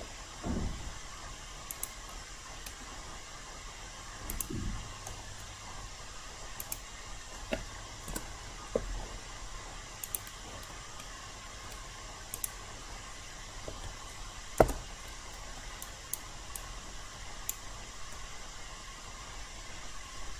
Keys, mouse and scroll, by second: 4.3 shift+click, 6.6-8.1 shift+drag, 8.1 Return, 10.0 click, 11.0 alt+middle click, 12.3 click, 14.5 BackSpace, 15.8 alt+right click, 16.5 alt+click, 18.1-20.3 alt+middle drag.